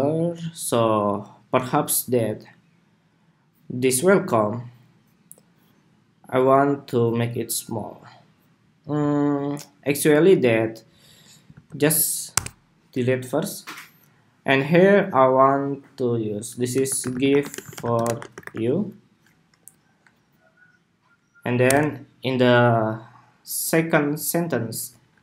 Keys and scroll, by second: 11.2 super+a.